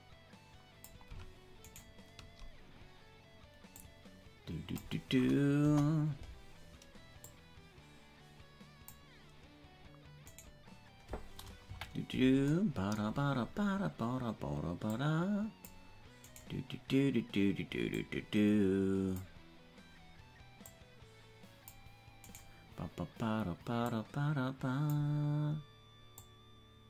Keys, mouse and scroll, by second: 2.4 shift+right click, 3.7-5.0 drag, 5.6 KP_0, 7.2-9.0 drag, 10.8 right click, 11.6 KP_Decimal, 13.1-13.8 scroll down 11, 14.8-15.9 drag, 16.8 right click, 17.9-19.4 drag, 20.8-21.8 drag, 22.9 right click, 23.8-25.0 drag, 26.2-26.8 drag.